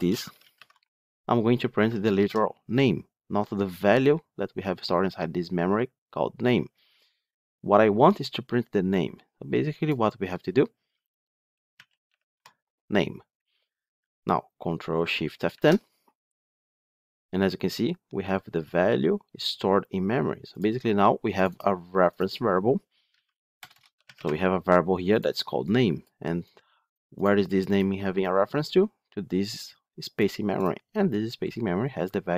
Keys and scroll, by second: 2.1 ctrl+shift+F10, 15.4 ctrl+shift+F10.